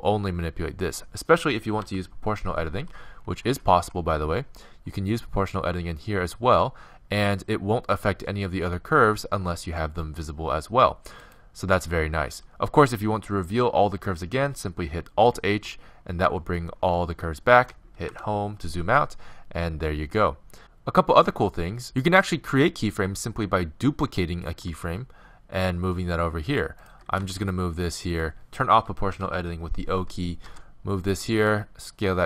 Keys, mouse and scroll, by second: 1.8 o, 2.8 g, 15.5 alt+h, 18.1 Home, 24.5 shift+d, 27.2 r, 29.1 o, 30.5 r, 31.4 s.